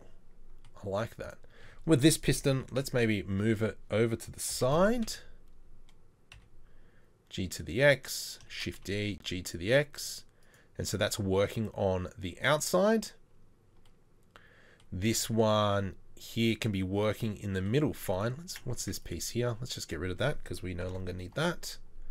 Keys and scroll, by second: 2.8 KP_7, 4.6 g, 8.6 shift+d, 18.8 Tab, 20.8 ctrl+l, 21.3 Delete.